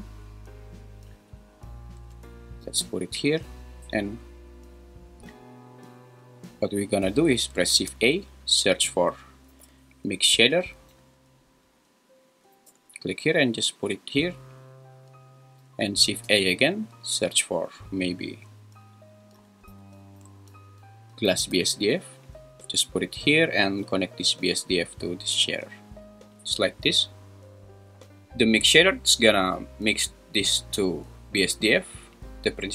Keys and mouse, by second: 2.6 g, 7.7 shift+a, 16.1 shift+a, 24.5-26.2 drag, 30.5 click.